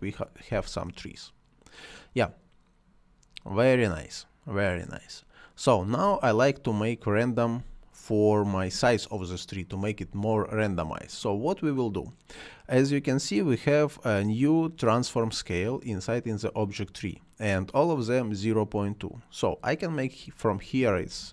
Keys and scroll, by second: 0.4 space, 5.9 space, 9.8 space, 20.7 r, 21.1 a.